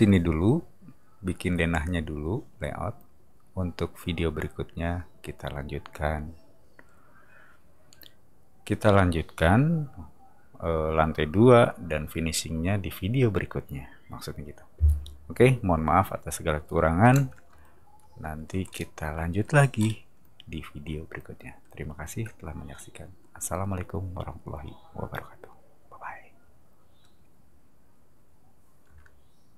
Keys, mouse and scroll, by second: 18.7 scroll down 2, 19.8 middle click, 22.0 space.